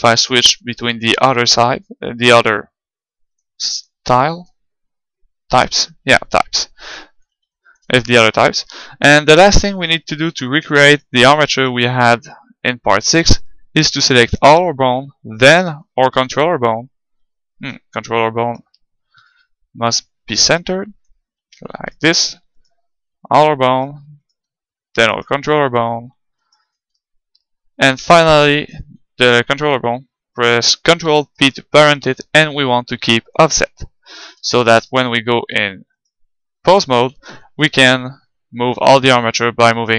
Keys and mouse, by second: 7.5-11.8 middle drag, 10.9-14.1 right drag, 15.4-17.3 right drag, 17.6 KP_3, 18.4-20.2 right drag, 19.2-21.1 drag, 19.6 middle click, 21.4-23.3 middle drag, 21.8-27.1 right drag, 27.1-30.4 middle drag, 27.3 right click, 31.0 ctrl+p, 34.7 ctrl+Tab, 35.4-37.7 right drag, 37.3 g.